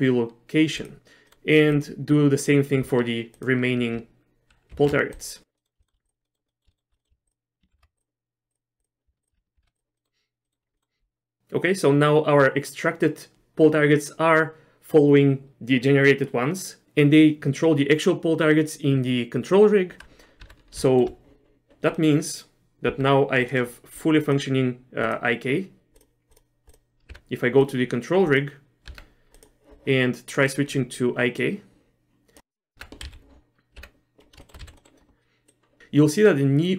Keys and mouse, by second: 1.3 middle click, 1.8 click, 3.5 shift+click, 4.8 ctrl+shift+c, 5.6 middle click, 5.9 shift+middle click, 6.3 middle click, 6.5 middle click, 6.7 shift+middle click, 7.0 middle click, 7.3 shift+click, 7.8 ctrl+shift+c, 8.8 click, 9.3 shift+click, 9.6 ctrl+shift+c, 10.0 middle click, 10.5 middle click, 10.8 middle click, 20.5 Tab, 21.0 shift+middle click, 22.1 middle click, 23.0 Tab, 23.5 click, 24.4 click, 25.1 click, 26.0 click, 26.7 click, 27.2 Tab, 28.4 click, 29.0 Tab, 29.4 click, 31.6 click, 32.8 Tab, 33.1 z, 33.8 Tab, 34.5 shift+middle click, 34.7 z, 34.8 middle click, 35.6 click.